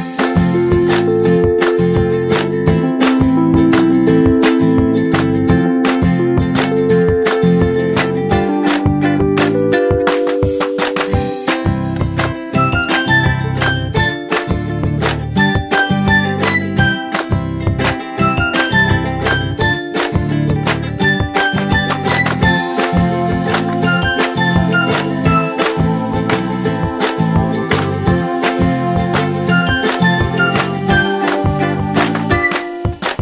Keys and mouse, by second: 8.9-11.5 drag, 12.5 typing, 13.3 ctrl+a, 16.2-17.5 drag, 20.3 ctrl+a, 21.6 click, 24.8-30.5 drag, 26.3-27.1 typing, 30.5 ctrl+g, 31.5 click.